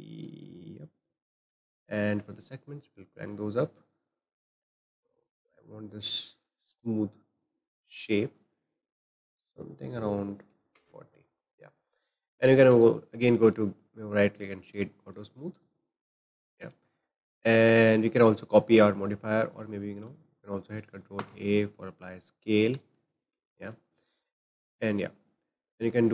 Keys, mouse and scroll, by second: 2.3-5.7 drag, 5.7 scroll down 2, 6.0-7.1 shift+middle drag, 7.1 scroll up 2, 8.0-9.8 shift+middle drag, 9.8-11.7 drag, 11.7 shift+middle click, 12.7-15.1 right drag, 15.1 click, 15.5 scroll down 1, 15.7-20.7 shift+middle drag, 20.7 click, 21.1 ctrl+a, 23.5 shift+middle click, 24.5-25.7 scroll down 1, 25.7-26.1 shift+middle drag.